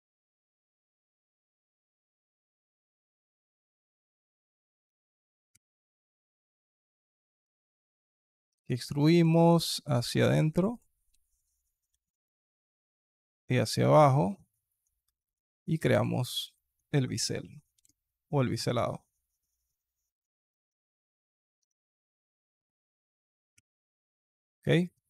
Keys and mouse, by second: 0.5 alt+click, 0.9 alt+click, 4.5 click, 6.0 Tab, 6.4 alt+click, 6.8 KP_2, 7.1 click, 7.5 alt+shift+click, 8.4 e, 9.0 s, 10.9 e, 15.1 KP_2, 17.6 ctrl+b, 21.1 alt+click, 21.4 Tab, 23.4 /, 24.9 click.